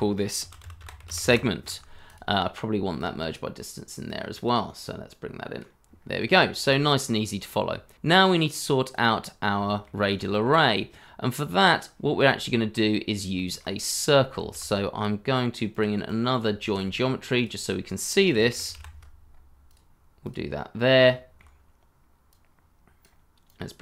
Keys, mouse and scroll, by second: 0.4-1.8 typing, 6.0 scroll down 1, 6.3 shift+middle click, 7.3-8.6 scroll down 1, 8.7 scroll down 1, 9.6 shift+middle click, 9.8 scroll up 1, 10.3 shift+middle click, 10.6 scroll up 1, 12.0 scroll down 1, 13.3 shift+middle click, 14.4 shift+a, 16.0 double click, 16.6 shift+a, 18.2-19.2 typing, 20.7 scroll up 1, 21.0 shift+middle click.